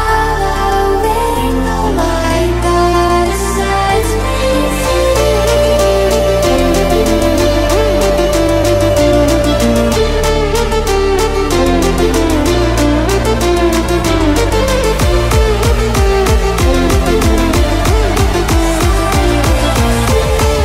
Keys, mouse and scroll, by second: 14.2 v, 14.6 click, 18.5 click.